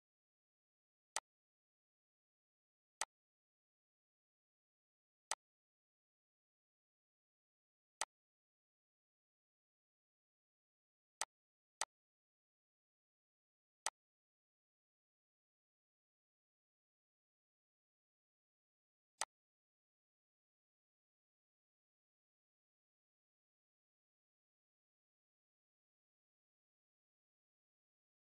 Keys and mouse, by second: 0.1 click, 4.1 ctrl+d, 5.1 Delete, 6.1 click, 7.9 click, 9.0 Delete, 9.7 click, 10.4 click, 12.3 click, 13.1 Delete, 14.0 click, 15.0 click, 15.9 click, 16.5 click, 17.1 click, 18.7 click, 21.1 click, 22.0 click, 24.1 click, 28.1 click.